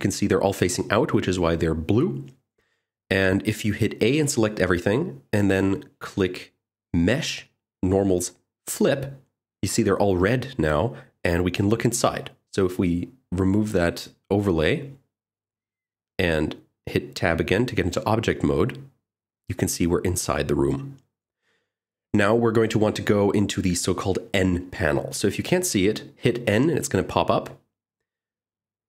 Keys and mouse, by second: 4.7 a, 6.7-9.1 drag, 10.9 click, 12.1 Tab, 15.6-17.1 drag, 28.5 click.